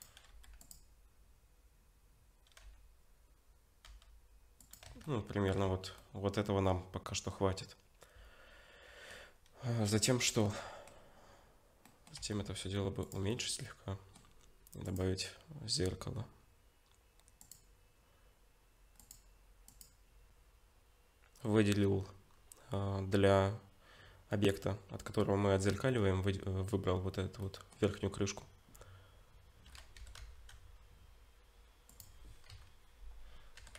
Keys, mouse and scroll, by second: 4.9 Tab, 5.1 middle click, 5.6-6.1 scroll down 4, 6.0 middle click, 10.4 middle click, 11.9 middle click, 12.2 s, 13.3 middle click, 14.9 click, 19.0 click, 22.3-22.7 scroll down 1, 24.3 middle click, 24.3-25.8 scroll down 3, 27.4 middle click, 28.0-30.0 scroll up 2, 30.0 g, 32.5 KP_7, 33.6 g.